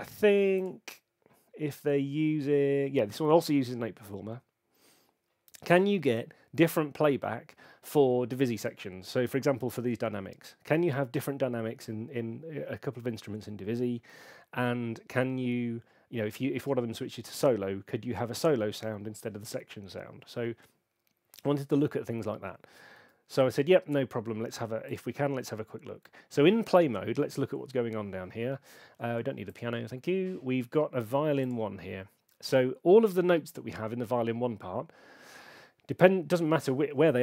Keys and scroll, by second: 36.6 super+2.